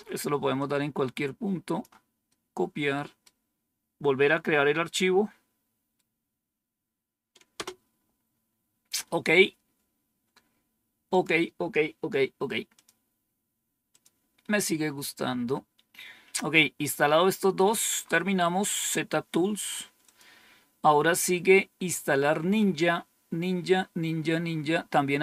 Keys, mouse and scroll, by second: 0.5-1.7 drag, 2.2 right click, 4.7-5.9 right drag, 7.4 Return, 11.0 click, 12.6 click, 13.8 click, 16.9-17.9 scroll down 2, 17.9 scroll up 2, 19.9 click, 22.8-24.1 scroll down 2.